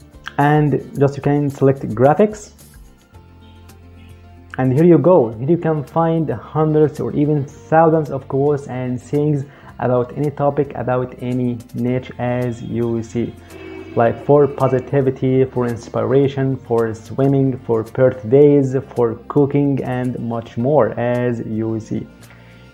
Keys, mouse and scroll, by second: 1.8 click.